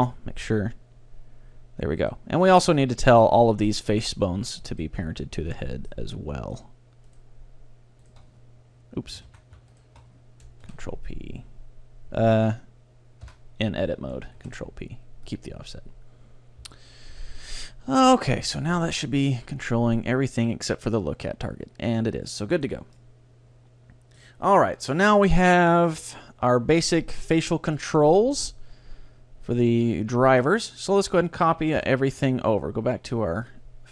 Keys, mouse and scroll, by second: 0.0-1.8 right drag, 0.2 r, 2.6 middle click, 3.9 middle click, 3.9-11.6 right drag, 5.6-7.4 middle drag, 9.4 ctrl+z, 10.7 ctrl+p, 13.3 Tab, 14.4 ctrl+p, 16.6 Tab, 17.0-18.6 middle drag, 17.2 a, 18.0 right click, 18.6 r, 20.1 middle click, 22.7-24.4 right drag, 23.0-24.8 middle drag, 25.0-28.0 middle drag, 31.0-32.7 right drag, 31.8 KP_1, 33.4-33.9 drag.